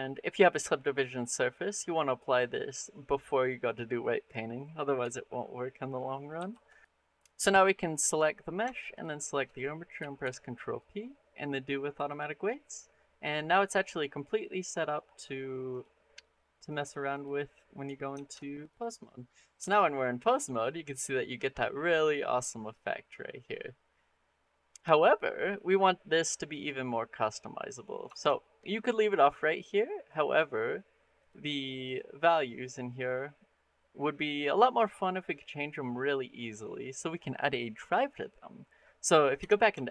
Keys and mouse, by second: 6.2 ctrl+a, 6.8 Escape, 10.0 ctrl+p, 13.7 middle click, 14.4-14.8 middle drag, 16.5 click, 16.9 click, 18.0 ctrl+Tab, 18.9 click, 19.4 r, 26.3 click, 27.1 middle click, 27.9 shift+middle click, 28.2 middle click, 29.9 click, 31.0 click, 31.7 click, 39.2 Tab, 39.7 shift+middle click.